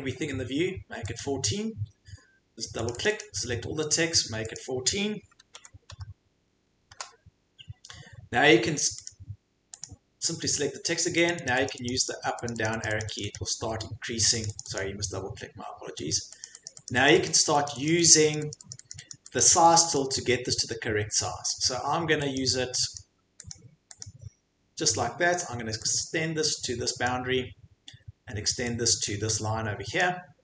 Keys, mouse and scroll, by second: 1.2 click, 2.9 click, 3.0 click, 3.2 click, 4.5 click, 5.5-5.9 typing, 6.9 Return, 9.0 click, 9.8 click, 11.3 click, 11.5 click, 11.7 click, 11.9 click, 12.1 click, 12.5 click, 12.6 click, 12.8 click, 13.0 click, 13.2 click, 13.3 click, 14.4 click, 14.6 click, 14.8 click, 16.1 click, 16.4 click, 16.6 click, 16.9 click, 17.1 click, 17.3 click, 17.4 click, 17.6 click, 17.8 click, 18.1 click, 18.3 click, 18.5 click, 18.7 click, 18.9 click, 19.1 click, 19.4 click, 19.6 click, 19.8 click, 20.0 click, 21.6 click, 22.3 click, 22.9 click, 23.5 click, 24.0 click, 27.0 click, 30.0 click.